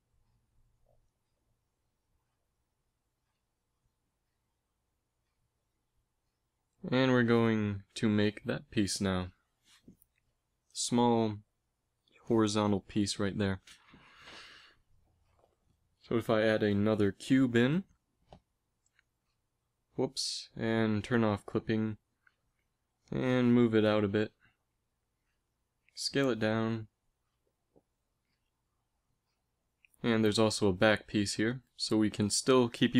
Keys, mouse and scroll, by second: 16.4 shift+a, 19.9 g, 21.6-23.5 drag, 22.6 g, 26.2 s.